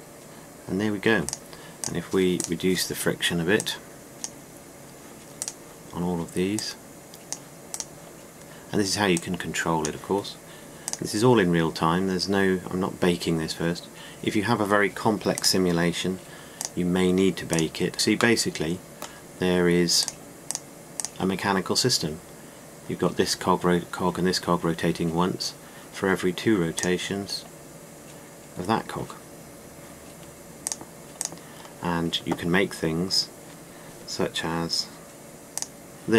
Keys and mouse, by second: 2.5 click, 6.0-7.2 right drag, 10.6-11.8 drag, 20.7 click, 31.3-34.4 drag.